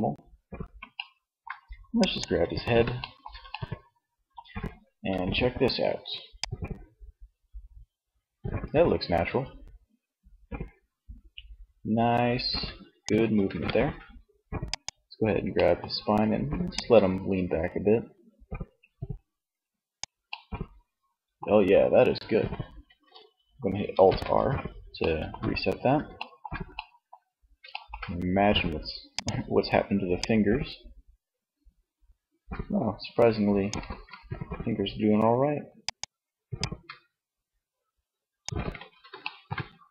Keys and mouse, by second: 5.6-7.2 drag, 12.6 ctrl+z, 14.0-17.7 drag, 19.4 middle click, 23.1 alt+r, 29.1-30.3 middle drag, 30.3 click, 33.0 ctrl+z, 36.6 click, 37.7 ctrl+z, 39.0-39.9 middle drag.